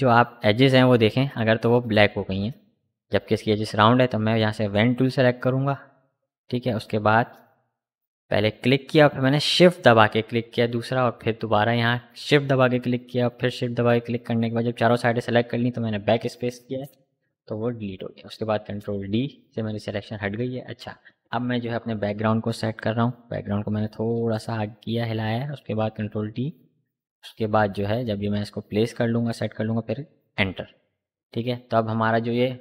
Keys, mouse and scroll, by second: 3.1 click, 6.3 click, 14.0 ctrl+d, 14.9 v, 17.7-22.0 drag, 22.0 ctrl+t, 23.1-30.5 drag.